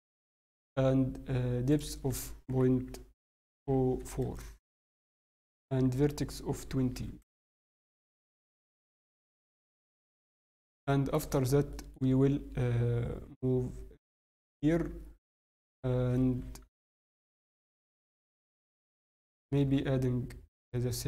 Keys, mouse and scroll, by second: 1.7 click, 5.5 click, 7.7 click, 8.8 KP_1, 9.3 scroll, 9.7 scroll down 1, 9.7-10.0 scroll down 2, 10.0 g, 11.3 scroll, 11.7 shift+middle click, 11.7 scroll up 2, 13.1 r, 17.6 scroll up 2, 17.7 shift+middle click, 19.6 shift+s.